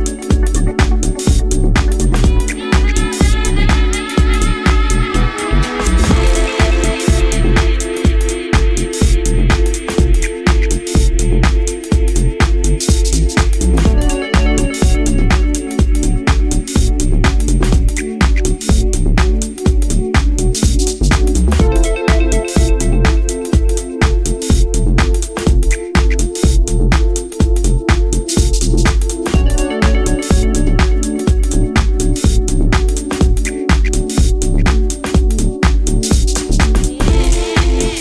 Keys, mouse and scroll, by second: 0.8 alt+right click, 1.6 x, 2.8-3.9 scroll down 13, 4.4-5.5 scroll down 1, 4.4 a, 7.3 s, 9.3 click, 9.7 g, 12.5 z, 13.0 middle click, 13.7 Tab, 14.1-15.0 scroll up 1, 15.0 shift+middle click, 15.0 scroll up 3, 15.7 scroll up 1, 16.1-16.6 scroll down 3, 16.7 middle click, 17.6 scroll up 2, 18.8 Tab, 20.1 alt+right click, 22.1-22.6 scroll up 4, 22.5 shift+middle click, 23.0-23.7 scroll up 2, 23.9 alt+right click, 24.6-24.9 scroll down 4, 25.3 f, 26.2-26.9 scroll down 3, 26.9 middle click, 28.3-28.6 scroll up 3, 29.1 alt+middle click, 30.1 middle click, 30.9 scroll up 2, 32.3 alt+right click, 33.3 e, 34.2 right click, 35.1 s, 37.0 click, 37.5 e.